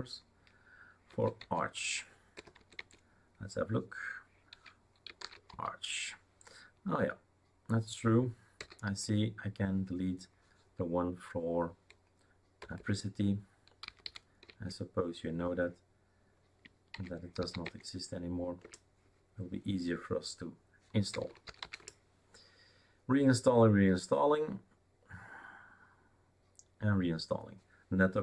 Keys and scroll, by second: 1.1 a, 1.4 Tab, 2.3 BackSpace, 2.6 Tab, 2.8 Tab, 3.8-6.0 typing, 12.6-14.5 typing, 17.0-17.9 typing, 18.7 Return, 20.9-22.1 typing.